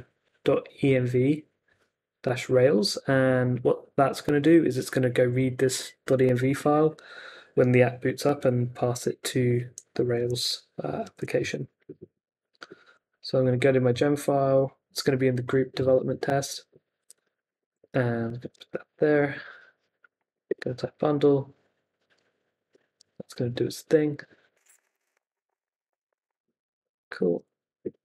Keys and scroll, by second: 10.4 super+Tab, 17.0 x, 17.5 super+s, 17.8 super+Tab, 19.5 ctrl+c, 19.7-20.7 typing, 26.5 super+k, 27.1 Up, 27.8 Return.